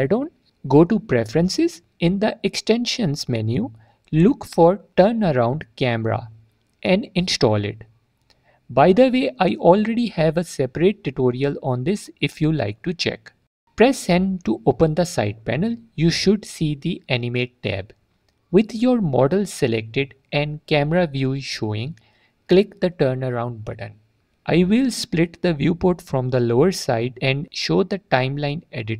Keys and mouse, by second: 10.1 click, 13.6 n, 14.4 click, 16.1-23.4 drag, 23.4 typing, 27.4 click.